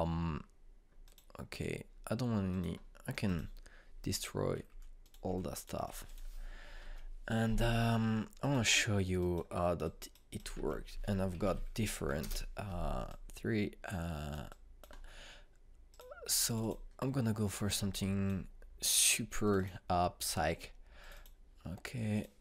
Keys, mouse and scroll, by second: 2.0 click, 5.6 Delete, 6.0 click, 6.2 Delete, 6.5 click, 6.7 Delete, 7.0 click, 7.8 ctrl+space, 9.4 click, 11.5 ctrl+space, 11.6-12.9 typing, 13.1 Return, 14.0-19.8 drag.